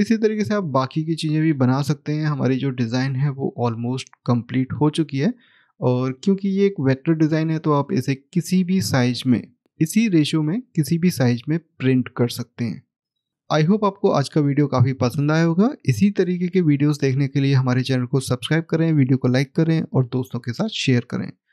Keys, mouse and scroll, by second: 3.0 middle click, 5.0 middle click, 5.0-7.1 scroll up 1, 7.1 click.